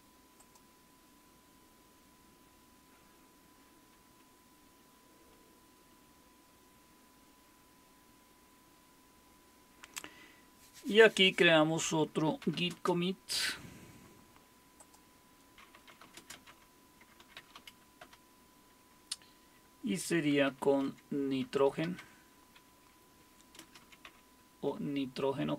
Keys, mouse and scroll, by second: 4.8 Left, 5.2-5.9 typing, 12.1-13.0 typing, 14.8 click, 15.5-18.1 typing, 20.1-22.5 typing, 23.6-24.5 typing.